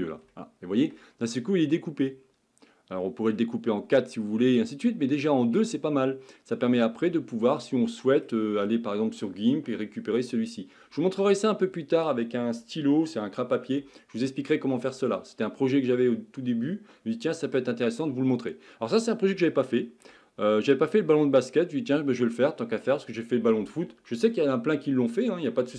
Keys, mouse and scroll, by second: 1.5-5.2 middle drag, 5.2 scroll up 3, 5.6-25.7 middle drag.